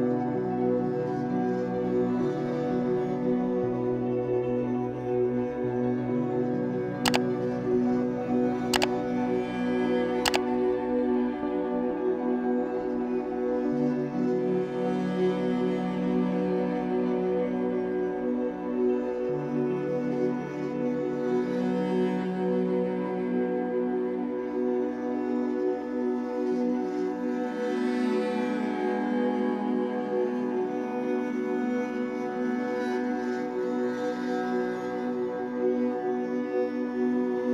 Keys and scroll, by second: 27.9 space.